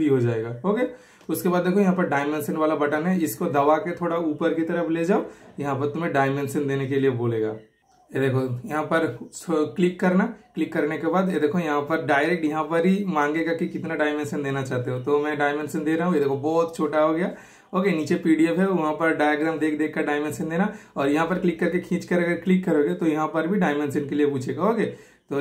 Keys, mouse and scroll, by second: 1.9 click, 7.8 super+click, 14.7 super+Return, 16.6 super+scroll up 1, 19.1-19.8 super+scroll down 1, 21.1 super+click.